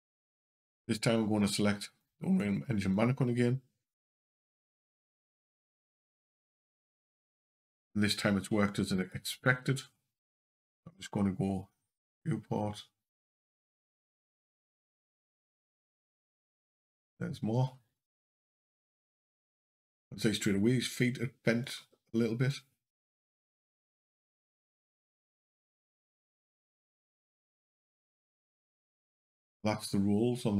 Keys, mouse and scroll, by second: 2.6 click, 27.1 click, 28.4 shift+click.